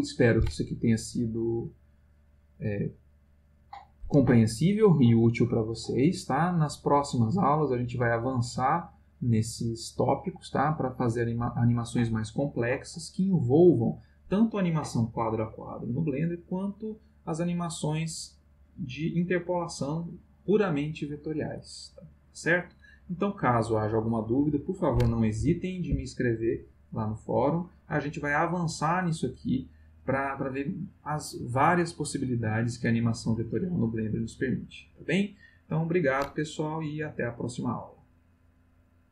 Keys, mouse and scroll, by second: 25.4 Escape.